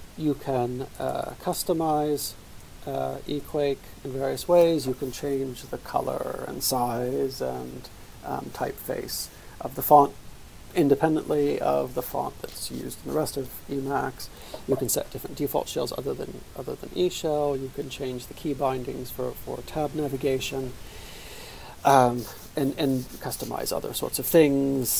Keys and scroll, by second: 0.0-2.2 typing, 2.6 Return, 3.4 Return.